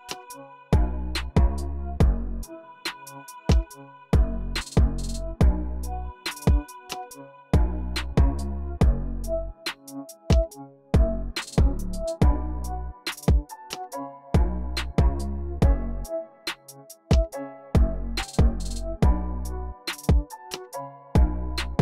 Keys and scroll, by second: 2.1 x, 5.1 x, 6.3-7.2 typing, 17.0 m, 19.9 BackSpace, 20.7 c.